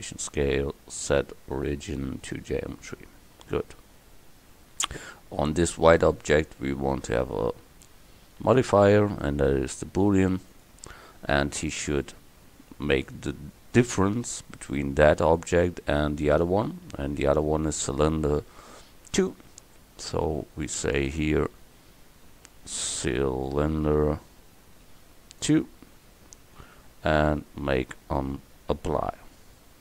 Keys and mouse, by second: 1.0-2.4 drag, 18.0-29.8 right drag.